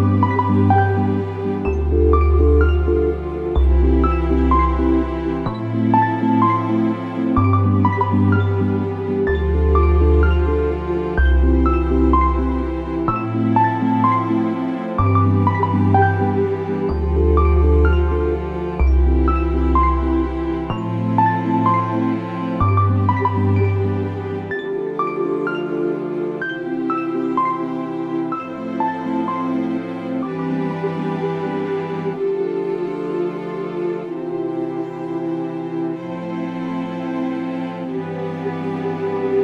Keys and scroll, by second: 2.7 ctrl+-, 2.8 ctrl+-, 7.3 ctrl+=, 13.6 ctrl+shift+[, 15.6 ctrl+], 18.6 alt+[, 19.3 alt+[, 19.3 ctrl+], 22.2 Down, 22.3 Down, 22.5 Down, 22.6 Down, 22.7 Down, 23.1 Up, 23.4 Up, 36.5 Left, 36.6 Left, 36.7 Left.